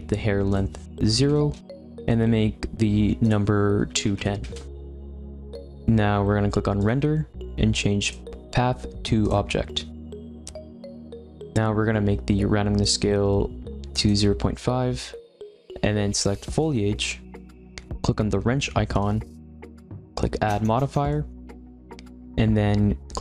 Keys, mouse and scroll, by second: 0.4-11.1 drag, 12.8-16.6 drag, 18.9 click.